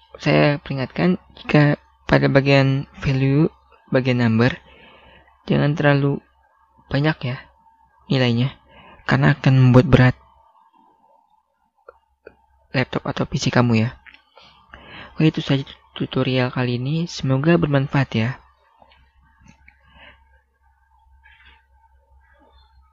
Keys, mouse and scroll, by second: 5.6 click, 21.4 click.